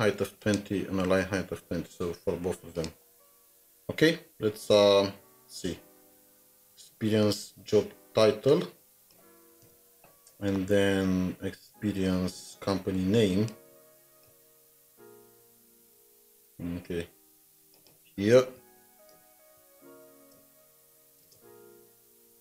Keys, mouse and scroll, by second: 4.9 double click, 5.0 scroll down 1, 5.4-6.2 scroll up 4, 9.6 alt+shift+Down, 10.5-11.6 scroll up 3, 14.4 ctrl+c, 14.6 typing, 14.8 ctrl+c, 14.8-15.2 scroll down 2, 16.6 scroll down 1, 18.8 shift+End, 20.0-20.6 typing, 20.2 Return, 22.0-22.4 typing.